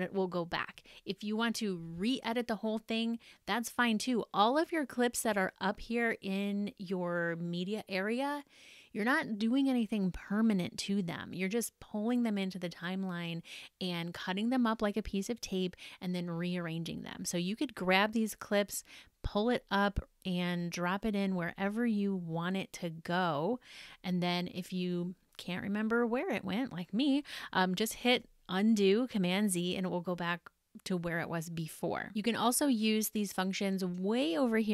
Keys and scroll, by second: 27.6 super+z.